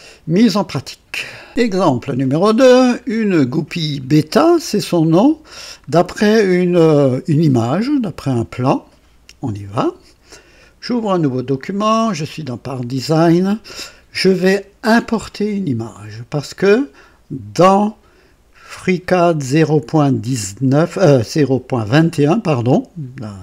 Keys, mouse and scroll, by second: 1.2 right click, 2.4-5.8 drag, 7.0-9.1 drag, 11.5 click.